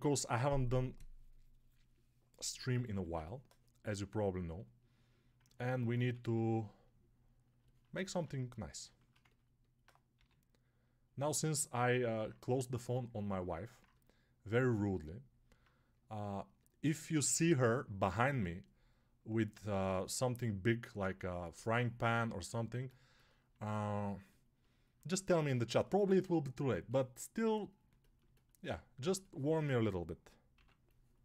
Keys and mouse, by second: 5.9 1, 10.0 g, 30.4 6.